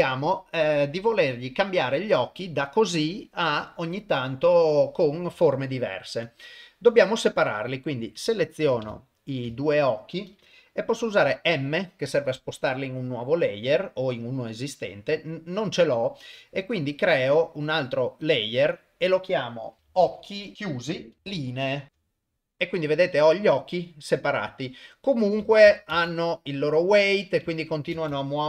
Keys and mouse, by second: 5.5-6.1 ctrl+middle drag, 7.7 click, 8.4 shift+click, 8.9-9.4 ctrl+middle drag, 9.6 shift+middle drag, 11.2 m, 19.9 c, 21.3 e, 21.9 shift+click, 22.3 click, 22.9 click, 26.0 shift+space, 27.9 shift+space.